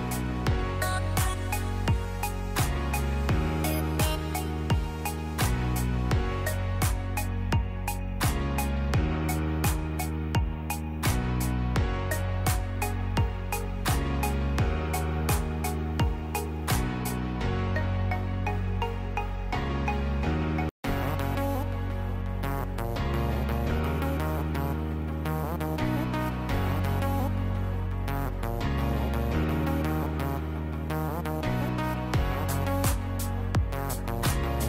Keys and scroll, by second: 21.1 F9, 22.6 space.